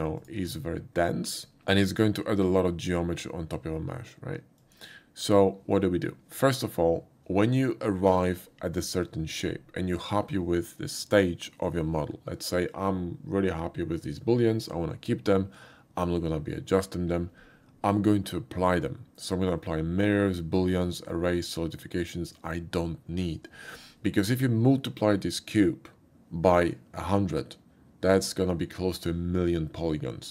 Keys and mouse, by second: 0.2 click, 1.3 click, 1.6 z, 4.1 z, 4.6 click, 20.7 typing.